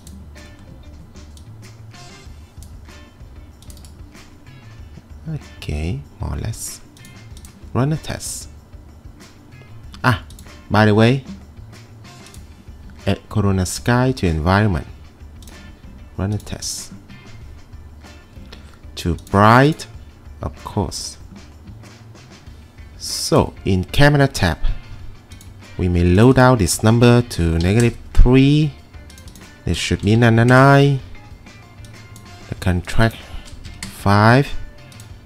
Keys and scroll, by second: 27.4-28.1 typing, 30.0 9, 30.2 9, 30.3 9, 30.5 Return, 33.4-34.4 typing.